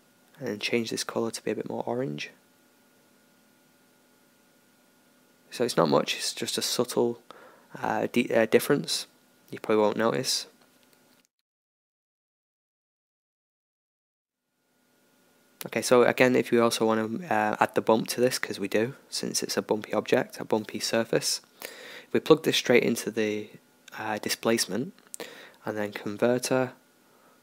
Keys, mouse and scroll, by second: 6.7-8.1 middle drag, 9.1-13.8 middle drag, 13.8-17.4 drag, 13.8 shift+a, 22.4 shift+a.